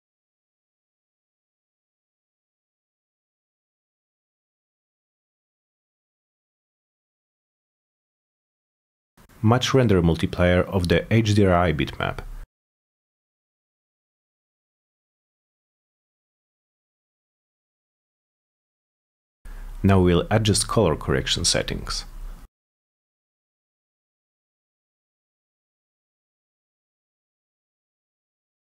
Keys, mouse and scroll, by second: 3.1 click, 4.5 click, 7.8-8.1 drag, 8.6 click, 9.0 m, 11.1 click, 11.2 click, 13.0 click, 14.5 click, 14.9 2, 15.5 Return, 17.1-17.8 drag, 18.6 click, 18.7 click, 21.4 click, 22.3 3, 22.8 Return, 24.6 click, 25.0 2, 25.4 Return.